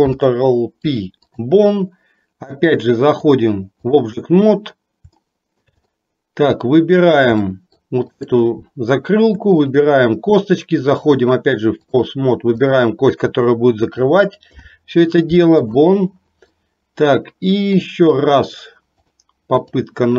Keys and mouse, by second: 0.1 ctrl+p, 3.3 click, 5.2 shift+middle click, 6.0 middle click, 7.6 middle click, 8.2 click, 9.6 shift+click, 10.9-12.1 drag, 14.5 ctrl+p, 16.6-17.8 middle drag, 19.3 click.